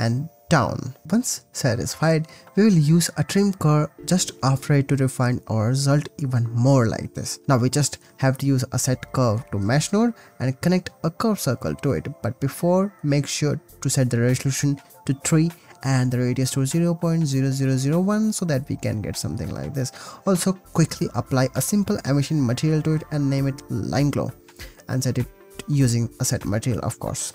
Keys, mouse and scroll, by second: 0.0 click, 0.4 click, 0.9 click, 1.0 shift+a, 4.8 click, 6.0-7.4 drag, 7.4 shift+a, 10.2-12.0 drag, 12.3 click, 12.7 click, 12.8-13.9 drag, 14.0-17.3 drag, 17.6 click, 17.9 click, 19.6 ctrl+s, 20.0 shift+a, 21.4 click, 22.9 click, 23.3 click, 23.8-26.1 shift+drag, 26.1 Return, 26.8 click.